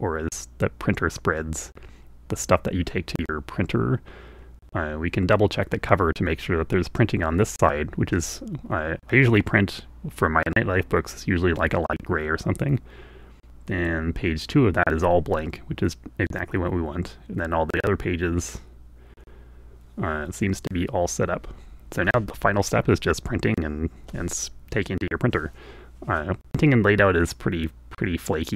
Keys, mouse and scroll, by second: 28.1 click.